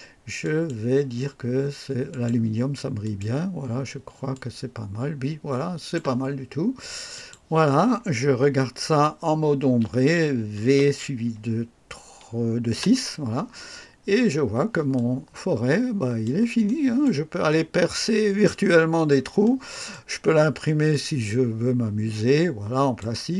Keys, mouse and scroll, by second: 0.4 click, 2.0 click, 3.0 click, 4.3-6.1 drag, 7.1 click, 10.6 v, 12.7 KP_6, 14.9-16.4 drag, 16.6 right click, 17.4 click, 18.8 scroll up 1, 19.4-20.1 right drag, 20.3 scroll down 1, 20.9-23.1 drag.